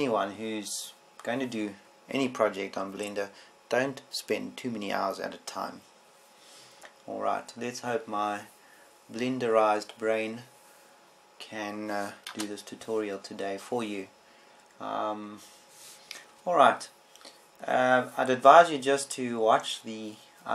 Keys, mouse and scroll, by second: 14.1 KP_0, 17.5 Escape.